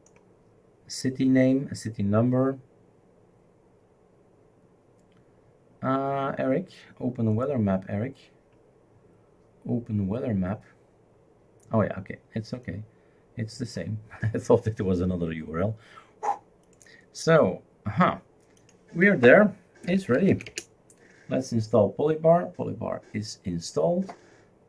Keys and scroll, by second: 19.6-20.8 typing.